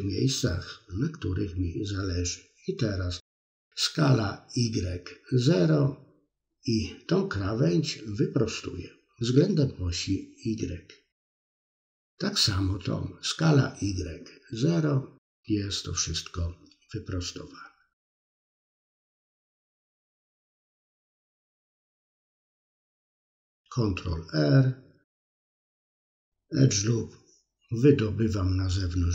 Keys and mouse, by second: 1.1 middle click, 2.1 KP_3, 4.1 ctrl+z, 4.4 middle click, 5.0 click, 5.1 middle click, 6.4 click, 7.2 s, 8.2 middle click, 9.8 alt+shift+click, 12.1 s, 13.4 middle click, 14.6-15.7 middle drag, 15.9 KP_3, 17.7 middle click, 18.4 KP_3, 18.8 middle click, 19.6 KP_3, 20.3-21.8 middle drag, 21.9 middle click, 22.4 ctrl+r, 23.0 middle click, 24.4 click, 24.7 middle click, 25.1 click, 25.6 middle click, 26.0 click, 26.1 middle click, 26.5 middle click, 27.1 click, 27.5 middle click, 28.0 ctrl+r, 28.6 middle click, 29.0 click.